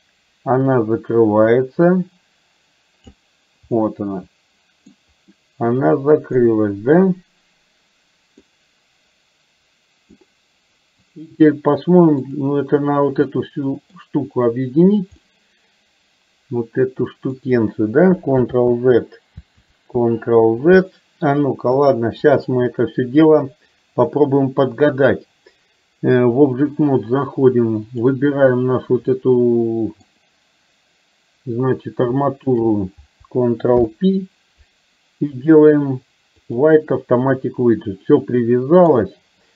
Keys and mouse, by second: 8.7-10.2 middle drag, 11.1 click, 12.3 click, 13.3-14.1 middle drag, 15.3-17.6 middle drag, 18.8 ctrl+z, 21.8 KP_3, 25.2-26.8 drag, 27.9 click, 29.2-30.2 middle drag, 32.6 shift+click, 33.8 ctrl+p, 38.1 middle click.